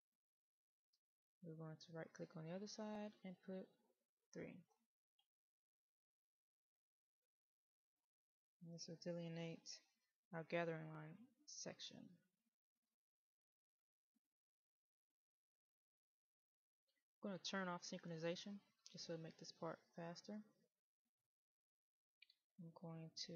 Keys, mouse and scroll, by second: 7.1 click, 18.4-18.9 scroll up 1, 18.9 middle click.